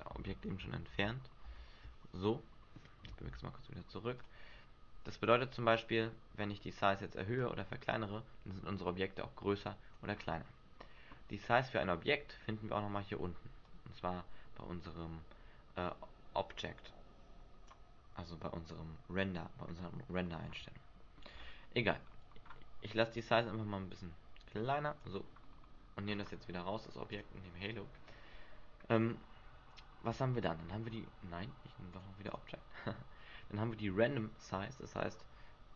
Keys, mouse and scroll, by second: 0.4 ctrl+z, 0.9 ctrl+z, 3.1 m, 5.2 right click, 6.4-6.9 scroll down 2, 7.4 click, 10.1-11.9 scroll down 4, 11.9-13.5 scroll down 3, 13.6 click, 20.2 scroll up 2, 21.8-22.3 scroll up 3, 23.2 click, 23.2-23.8 scroll up 1, 25.4-26.0 scroll up 4, 26.0 scroll down 1, 27.1 click, 27.1 scroll down 3, 31.9 click, 32.3 click, 35.2 click.